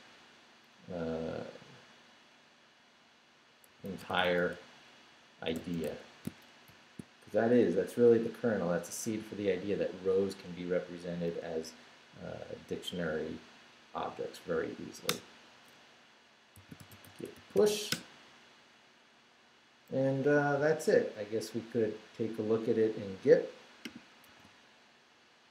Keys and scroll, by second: 3.5-6.7 typing, 15.1 Return, 16.3-18.0 typing, 24.3 super+r.